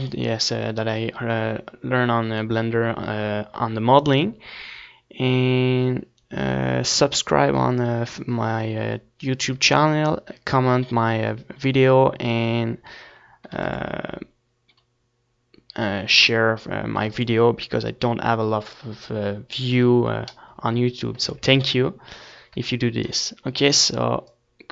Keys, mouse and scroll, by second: 5.3-16.5 middle drag, 13.2 ctrl+s, 16.8 ctrl+s, 20.0-21.3 middle drag, 21.3 ctrl+s.